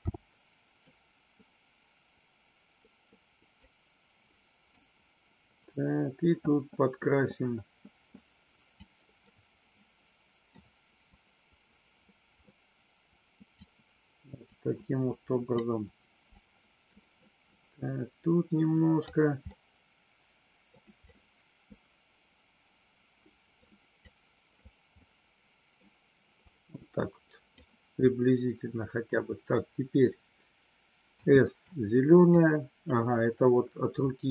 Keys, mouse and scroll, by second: 0.0 n, 0.9-3.5 drag, 4.8-8.9 drag, 9.2-10.5 middle drag, 11.1-13.6 drag, 14.5-15.5 drag, 16.2-19.0 drag, 19.5-20.6 middle drag, 21.0-23.5 drag, 24.0 click, 25.0 middle click, 26.5-27.6 drag, 31.0 s, 31.8 click.